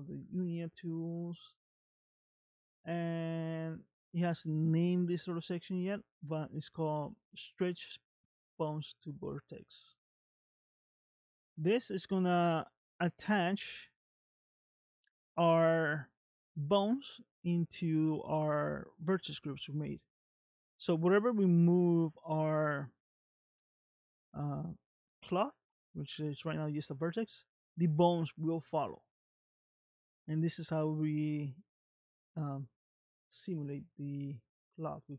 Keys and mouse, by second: 30.6 middle click, 33.6 middle click.